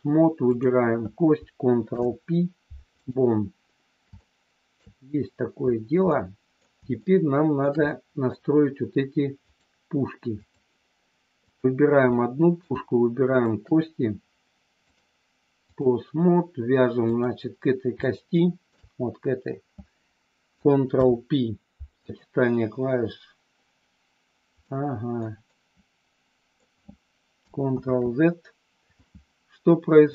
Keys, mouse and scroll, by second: 1.8 ctrl+p, 4.2 middle click, 5.9 middle click, 6.9 shift+middle click, 7.8 middle click, 9.3-10.5 drag, 12.1 middle click, 14.8-15.8 drag, 17.1 click, 18.2 shift+middle click, 20.8 ctrl+p, 24.7 middle click, 25.5-26.6 middle drag, 27.7 ctrl+z.